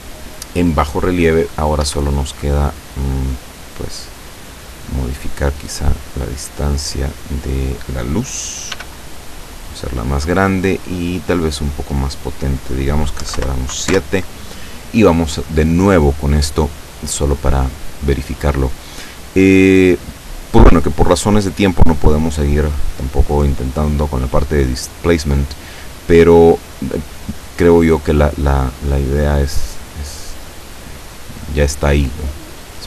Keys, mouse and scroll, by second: 1.9 Escape, 2.4-2.8 scroll down 1, 3.3 middle click, 3.9 scroll up 1, 4.0 scroll down 1, 4.1-4.5 scroll up 1, 4.6 scroll down 1, 4.8 middle click, 5.7-6.0 scroll up 1, 6.5-7.8 drag, 8.8 s, 9.5 click, 11.3 click, 13.3 KP_7, 13.4 Return, 13.9 F12.